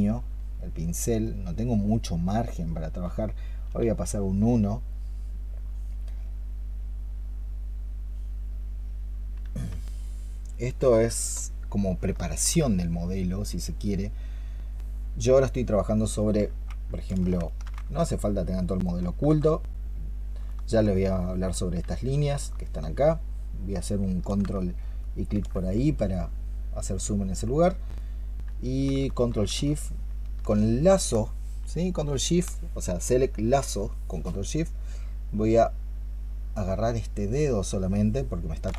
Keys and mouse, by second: 10.4 double click, 12.0 alt+click, 16.3 alt+click, 17.3 ctrl+shift+click, 17.9 alt+click, 18.7 alt+click, 20.8 alt+click, 22.3 alt+click, 24.9 ctrl+click, 28.9 alt+click, 31.7 ctrl+shift+click, 35.2 ctrl+shift+click.